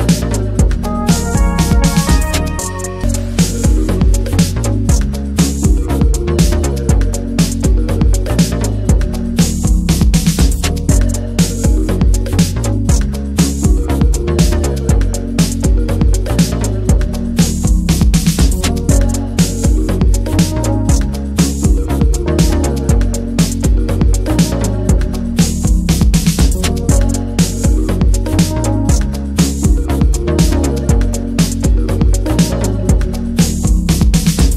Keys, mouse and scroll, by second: 0.0 click, 0.2 middle click, 0.5 ctrl+s, 0.8 /, 1.0 middle click, 1.2 scroll up 1, 1.4 shift+middle click, 2.1-4.3 shift+drag, 4.3 click, 4.6-5.6 middle drag, 5.6 /, 6.0-6.5 middle drag, 6.5 click, 6.6 scroll down 1, 7.1 alt+middle click, 7.5 scroll down 1, 7.6-8.0 middle drag, 8.0 click, 8.6 click, 8.8 middle click, 9.0-9.5 scroll up 3, 9.1 shift+middle click, 9.5-10.5 shift+middle drag, 10.5 click, 10.8 middle click, 10.9-11.2 scroll up 2, 11.2-12.4 middle drag, 12.4-14.3 drag, 15.0 alt+z, 15.2 middle click, 15.6 alt+middle click, 15.8 alt+z, 16.0 middle click, 16.4 /, 16.5 middle click, 16.7 scroll up 2, 17.0 shift+middle click, 17.6-18.6 shift+drag, 18.7 middle click, 19.0 /, 19.3 middle drag, 19.5 click, 19.8 click, 20.2 middle click, 20.5 click, 20.6 scroll down 1, 20.7-21.2 middle drag, 21.2 Tab, 21.6 alt+z, 21.9-22.7 middle drag, 23.0 alt+shift+drag, 23.3 alt+middle click, 23.5 alt+middle click, 23.8 alt+z, 24.0 alt+z, 24.3 s, 25.3 alt+z, 25.5 Tab, 25.7 click, 25.8 scroll down 2, 26.0 middle click, 26.2 click, 26.5 middle click, 27.3 ctrl+s, 27.5 click, 27.7-28.6 middle drag, 28.6 /, 28.8-29.1 middle drag, 29.1 Tab, 29.2 middle drag, 29.4 Tab, 29.6 click, 29.8-31.8 right drag, 31.9 Tab, 32.0 middle click, 32.2-32.7 scroll up 2, 32.4 shift+middle click, 32.7-33.3 middle drag, 33.3 Tab, 33.5 click, 33.7 ctrl+a, 34.1-34.5 middle drag.